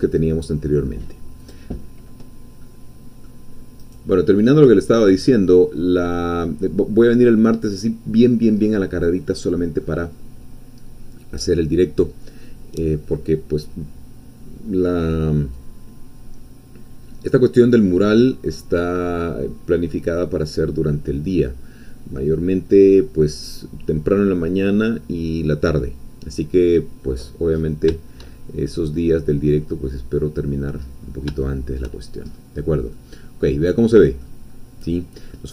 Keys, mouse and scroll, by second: 1.4 click, 2.6-3.8 middle drag, 3.8 right click, 4.4 click, 4.9 scroll down 1, 5.2-6.7 middle drag, 6.7-7.0 scroll down 1, 7.0-8.7 middle drag, 8.7 scroll down 1, 9.7 middle click, 15.6-20.7 drag, 27.1-27.8 scroll up 2, 28.3-28.7 shift+scroll down 1, 28.7-31.0 drag, 31.0 shift+middle click, 31.4 shift+click, 32.3 shift+scroll up 3, 32.5 scroll down 2, 32.9-34.4 middle drag, 34.5-34.8 scroll down 1, 34.8 middle click.